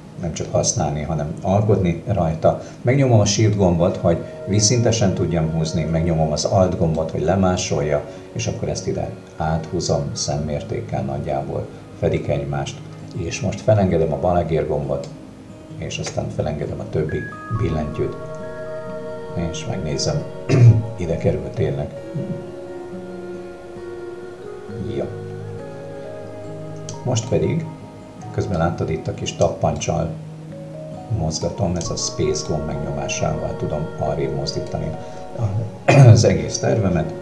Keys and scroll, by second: 29.8 space, 31.4 space, 34.7 space.